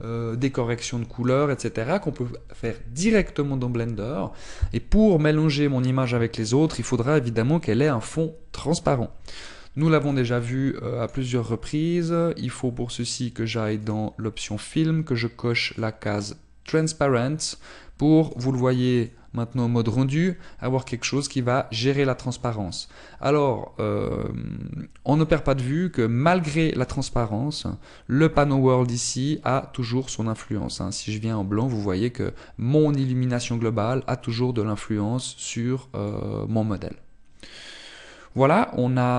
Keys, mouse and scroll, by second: 16.9 click, 16.9-18.4 scroll down 4, 18.7 click, 19.4 click, 27.0 click, 30.6 click.